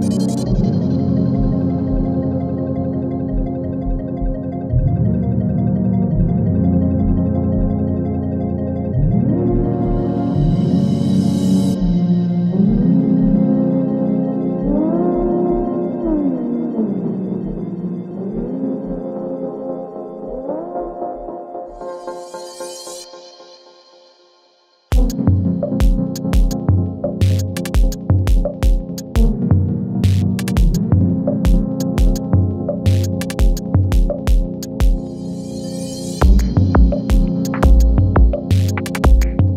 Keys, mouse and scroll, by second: 2.7-3.4 click, 3.9 space, 5.6-6.2 click, 6.0 space, 7.8-8.4 drag, 9.2 u, 10.0 space, 11.0 [, 12.9-15.1 drag, 15.3 [, 16.5 click, 16.8 Page_Down, 17.4 click, 17.8 [, 18.2 Page_Down, 18.6 click, 19.2 [, 19.6 Page_Down, 20.2 click, 20.7 [, 21.2 Page_Down, 21.6 click, 22.2 [, 22.5 Page_Down, 23.0 click, 23.5 [, 23.9 Page_Down, 24.5 click, 25.1 [, 25.5 Page_Down, 26.4 click, 26.7 [, 27.1 Page_Down, 28.0 click, 28.8 [, 30.2-30.9 click, 31.3 [, 31.8 space, 33.5-34.1 click, 33.9 space, 36.0-36.6 click, 36.8 space, 37.7 click, 38.3 shift+click, 39.3-39.5 click.